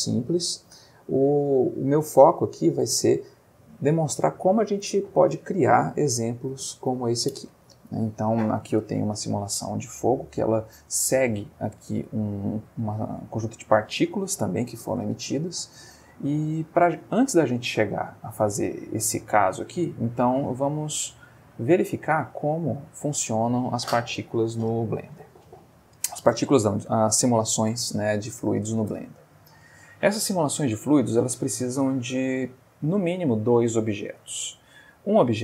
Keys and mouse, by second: 15.5 Escape, 18.1-19.0 middle drag, 20.4 click, 21.4 click, 22.6 click, 30.8-34.1 middle drag.